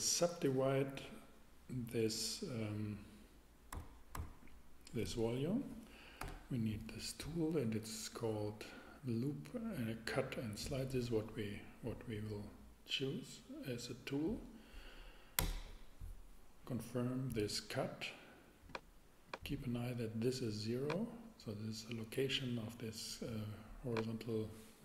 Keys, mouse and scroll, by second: 3.7 a, 4.1 a, 6.2 t, 10.7-11.9 drag, 15.4 Return, 20.9 click.